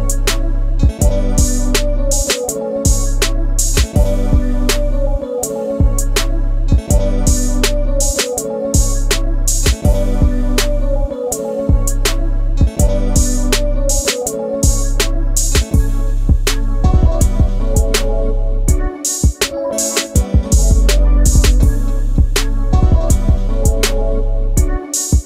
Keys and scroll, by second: 5.9-6.9 typing, 7.0 Return, 8.3-9.1 typing, 9.4 Return, 18.7-20.2 typing, 20.2 Return, 24.9-25.2 typing.